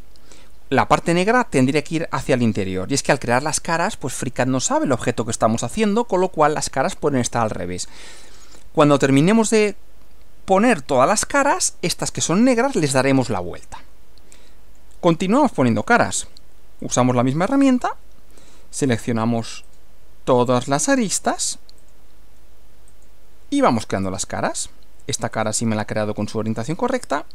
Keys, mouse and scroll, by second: 2.9 middle click, 3.9 middle click, 5.0-6.2 middle drag, 6.8-8.1 middle drag, 11.4 middle click, 14.4 middle click, 15.7 click, 16.8 click, 18.4 ctrl+click, 19.6 ctrl+click, 20.8 ctrl+click, 21.8 ctrl+click, 22.9 click, 24.1 click, 25.4 ctrl+click, 26.8 ctrl+click.